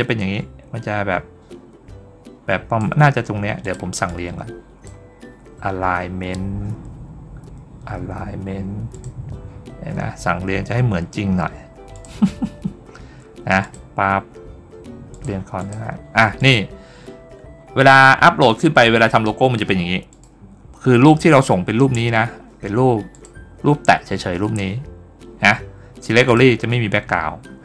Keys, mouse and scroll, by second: 3.5 click, 3.9-4.7 drag, 8.8 click, 11.8 click, 13.5 click, 15.0 click, 15.4 click, 16.2 click, 20.0 click, 23.0 click, 26.1 click.